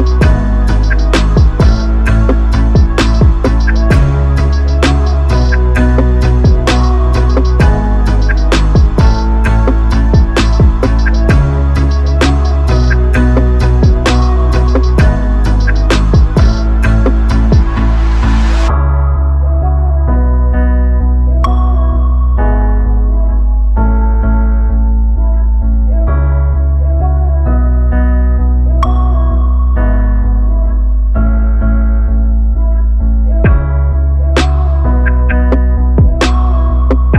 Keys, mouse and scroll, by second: 1.6 r, 6.3-7.8 drag, 12.0 click, 34.5 right click.